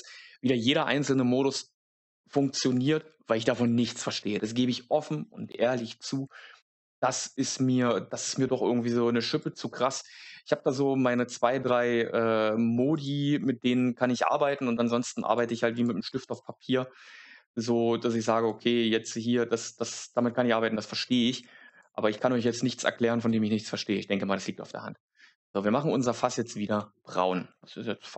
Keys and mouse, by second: 6.7 click, 7.1 click, 9.3-11.3 drag, 12.8 click, 13.3-14.2 drag, 15.1 click, 15.6 click, 15.9 click, 16.2 click, 18.4-20.1 drag, 20.9 click, 21.6 click, 22.3 click, 27.5-28.1 middle drag.